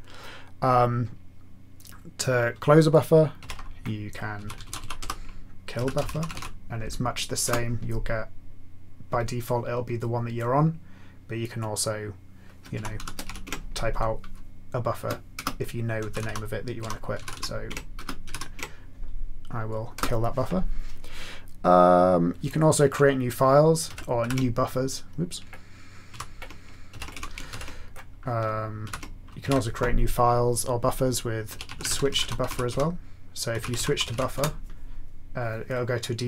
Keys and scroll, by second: 3.4 alt+x, 4.1-6.8 typing, 7.4 Return, 12.5-18.7 typing, 19.9 Return, 23.8 ctrl+x, 24.2 ctrl+b, 26.1 ctrl+g, 26.9 ctrl+x, 27.1 1, 27.5 ctrl+x, 28.8 ctrl+g, 29.4 alt+x, 31.2-34.6 typing.